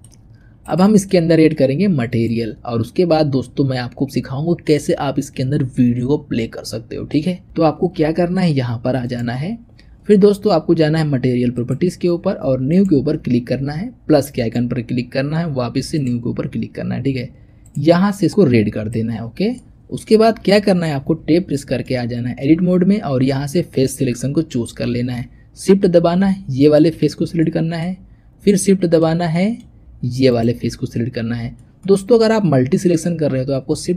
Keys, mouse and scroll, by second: 0.3 scroll up 1, 0.5 click, 0.9-2.0 shift+middle drag, 2.0 click, 9.1 click, 11.4 click, 12.5-17.6 drag, 19.4-20.3 middle drag, 20.3-21.1 scroll up 1, 21.1 Tab, 21.7-23.6 shift+middle drag, 23.6 click, 24.2-25.5 scroll up 2, 25.5-26.3 scroll up 1, 26.5 shift+click, 27.0-27.3 scroll down 3, 27.3 middle click, 27.8-28.5 scroll up 2, 28.5-30.2 shift+middle drag, 30.2 shift+click, 31.5-33.9 shift+middle drag.